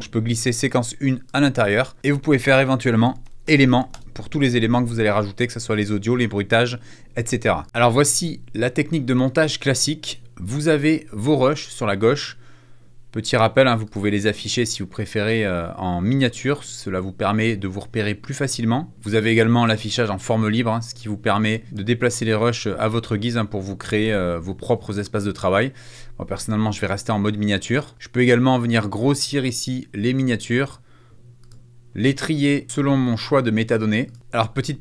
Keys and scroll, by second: 2.4-4.0 typing.